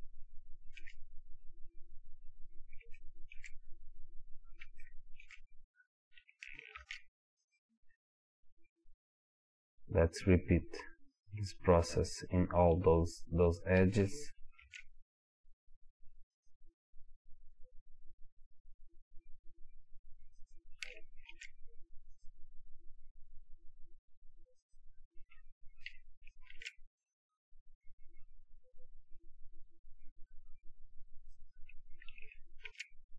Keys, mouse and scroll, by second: 3.7 scroll up 1, 4.8 shift+middle click, 5.6 scroll up 1, 5.7-10.8 middle drag, 6.8 ctrl+r, 10.8 click, 14.6 ctrl+r, 18.7-20.5 drag, 21.3 ctrl+r, 24.8 click, 26.6 ctrl+r, 30.8 click, 32.7 ctrl+r.